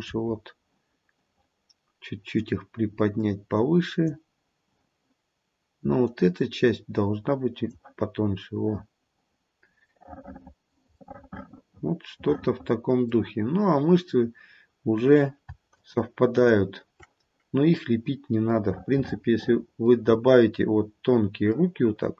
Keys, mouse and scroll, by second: 0.2-1.0 scroll down 1, 2.4 click, 2.4-3.3 scroll down 1, 6.1 click, 8.2-9.0 scroll down 2, 9.0 scroll down 1, 9.3-11.0 scroll up 2, 11.0 middle click, 14.9-15.4 scroll down 1, 15.8 shift+click, 16.3 shift+click, 17.7 scroll down 1, 18.6 middle click, 20.0-20.7 scroll up 1, 20.7-21.5 scroll down 1, 21.5 middle click, 21.9 middle click.